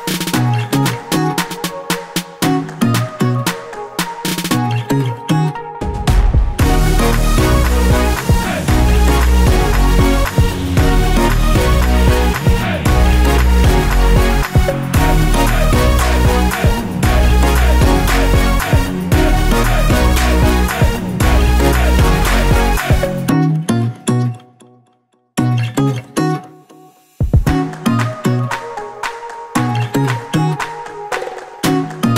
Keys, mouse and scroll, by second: 1.4 shift+a, 3.3 s, 4.5 click, 4.7 KP_Decimal, 5.1-5.7 scroll down 1, 5.7 s, 6.5 click, 7.1 s, 8.1 click, 8.5 s, 10.1 click, 10.6 s, 11.8 click, 12.1-14.4 middle drag, 13.0 g, 14.4 click, 14.9 g, 15.6 click, 15.8-16.3 scroll down 2, 16.3 middle click, 16.8 click, 17.0-18.9 middle drag, 17.9 scroll up 1, 18.3 s, 18.9 click, 19.4 s, 20.0 click, 20.3 scroll down 1, 20.5-21.5 middle drag, 21.5 click, 21.6 s, 23.1 click, 24.7 KP_7, 25.1 scroll down 2, 25.9 shift+z, 26.2-26.6 scroll up 1, 26.6 shift+d, 27.5 click, 27.8-29.3 middle drag, 28.3 KP_2, 29.1 KP_Decimal, 29.6 shift+z, 29.8 scroll down 1, 30.1 middle click, 30.8 r.